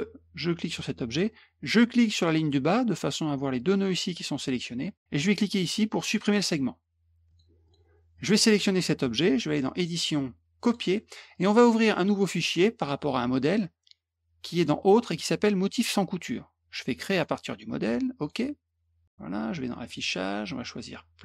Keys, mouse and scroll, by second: 0.7 click, 2.1 click, 6.2 click, 7.3 click, 7.6 click, 8.1 click, 9.7 click, 10.6 click, 11.3 click, 12.8 click, 14.5 click, 15.6 click, 17.1 click, 18.2 click, 19.8 click.